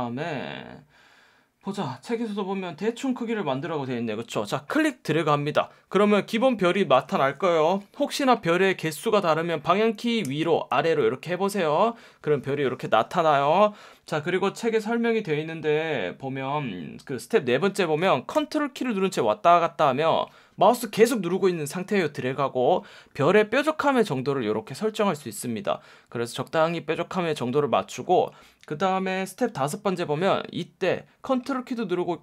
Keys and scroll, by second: 10.3 Up, 10.7 Down.